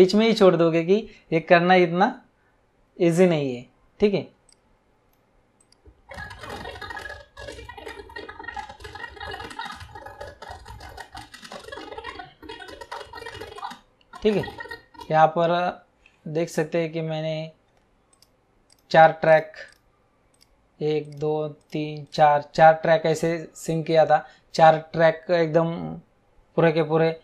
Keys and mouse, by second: 4.5 click, 5.6 click, 18.1 click, 20.3 click, 21.5 click.